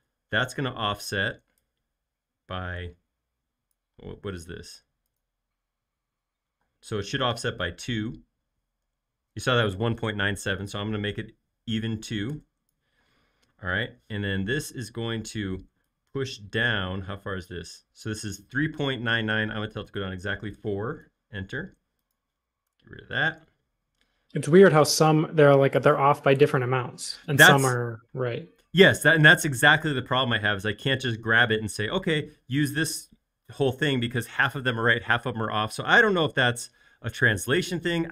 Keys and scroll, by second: 4.2 |, 4.5 l, 6.6 space, 7.9 super+z, 8.8 f, 11.7 2, 12.4 Return, 13.2 space, 14.1 p, 15.2 Escape, 20.0 4, 20.6 Return, 21.5 space, 22.8 BackSpace, 24.9 l, 27.2 space.